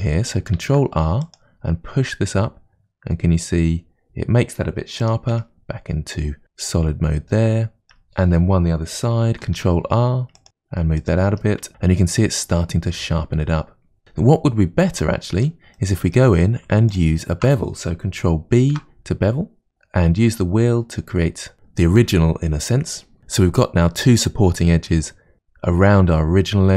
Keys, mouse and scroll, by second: 0.6 ctrl+r, 5.4 Tab, 6.0-6.4 scroll down 2, 6.4 middle click, 7.8 Tab, 9.5 ctrl+r, 11.4 Tab, 14.0-15.4 scroll down 1, 15.4 Tab, 15.8-16.9 middle drag, 16.9 alt+click, 18.8 ctrl+b.